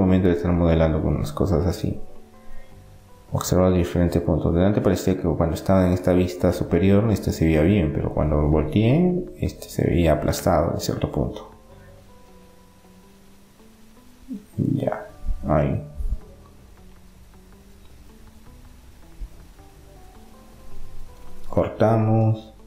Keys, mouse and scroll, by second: 1.4 r, 3.7-4.7 middle drag, 4.7-6.7 drag, 6.7 middle click, 7.0 e, 8.1-9.8 drag, 9.8-11.2 middle drag, 11.2-13.1 drag, 15.7-17.7 middle drag, 17.1 ctrl+r, 21.0-22.6 drag.